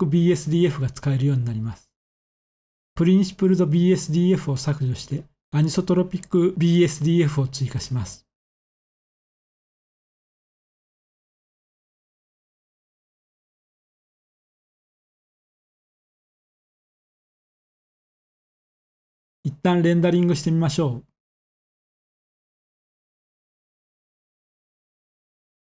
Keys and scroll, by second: 0.5 shift+x, 2.7 a, 10.5 +, 11.1 +, 11.3 +, 18.5 ctrl+s, 19.3 F12.